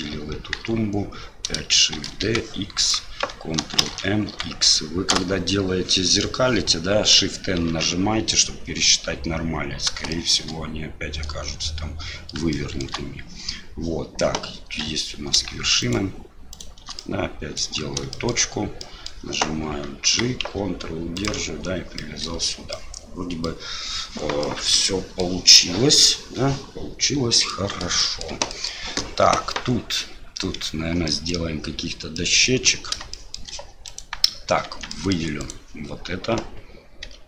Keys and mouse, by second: 0.5 KP_1, 2.0 shift+d, 3.8 ctrl+m, 7.7 shift+n, 10.1 shift+click, 12.5 shift+middle click, 15.8 shift+right click, 16.5 shift+right click, 17.0 middle click, 18.1 shift+middle click, 18.8 middle click, 22.1 middle click, 22.4 Tab, 22.7 middle drag, 22.9 click, 23.0 middle click, 23.1-23.5 drag, 24.4-25.2 middle drag, 26.0-27.5 middle drag, 28.0 shift+middle drag, 28.5 middle click, 31.1 middle click, 32.2-32.5 middle drag, 33.1 shift+middle drag, 33.9 right click, 34.6 Tab, 34.9 middle click, 35.4 right click, 37.1 3.